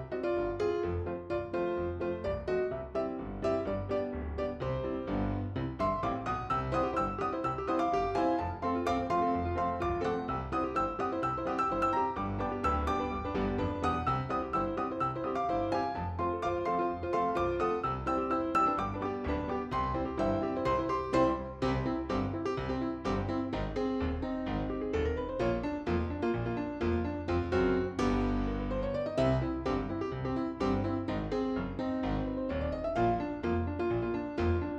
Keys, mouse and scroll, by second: 6.7 click, 7.2-8.1 scroll down 1, 8.2 ctrl+r, 13.5 click, 13.7-14.7 middle drag, 18.0 KP_3, 21.0-22.1 middle drag, 23.1 click, 24.7 alt+shift+click, 25.8 middle click, 26.4 s, 30.9 g, 33.5 s.